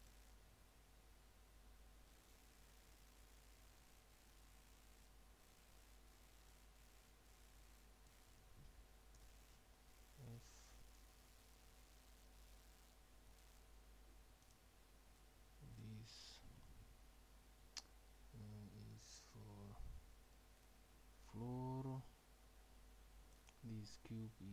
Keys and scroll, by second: 9.2 s.